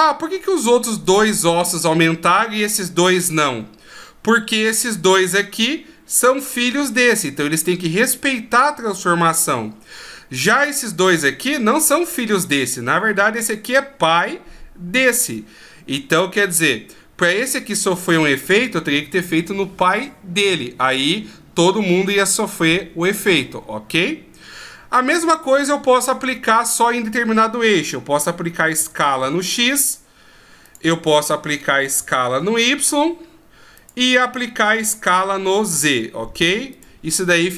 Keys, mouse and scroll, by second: 28.8 s, 32.0 s, 37.3-37.5 scroll down 2.